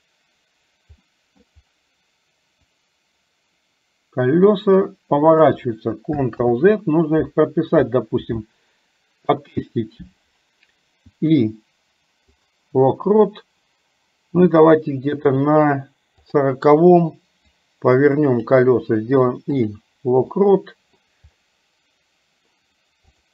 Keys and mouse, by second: 1.1 middle click, 2.6-5.6 drag, 6.5 ctrl+z, 17.6-18.7 drag, 20.4 middle click.